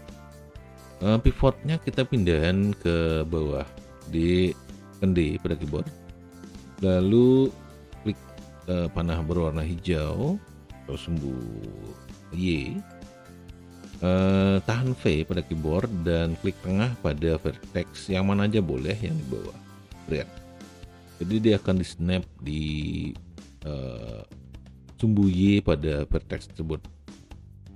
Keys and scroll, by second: 5.7 d, 15.1 v.